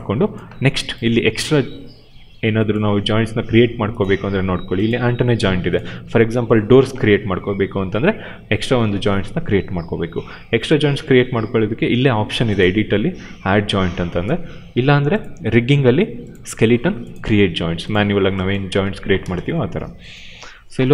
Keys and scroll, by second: 18.6 space.